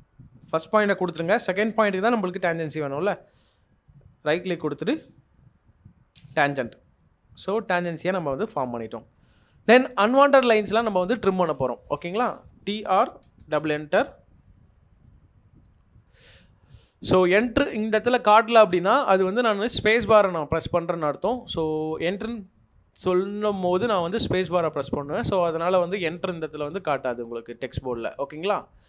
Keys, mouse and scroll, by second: 3.3 shift+right click, 6.1 shift+click, 8.2 shift+Escape, 8.8 middle click, 12.7-13.7 typing, 15.0 middle click, 28.0 middle click.